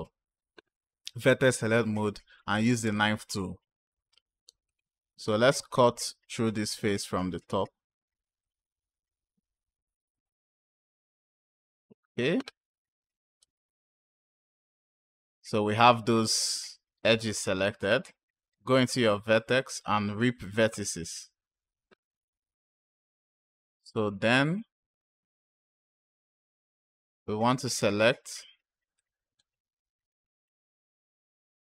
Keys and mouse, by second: 2.8 click, 4.5 click, 8.3 click, 11.1 click, 13.2 Return, 18.6-22.5 drag, 27.3 click, 28.8 click.